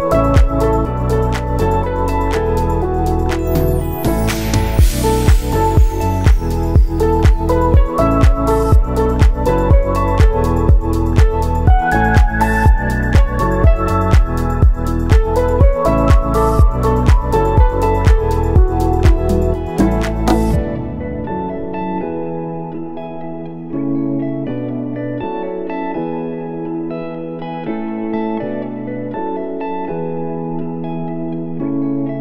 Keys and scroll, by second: 10.1 v, 15.4 w, 22.9 ctrl+c, 23.9 ctrl+v, 28.9 ctrl+s.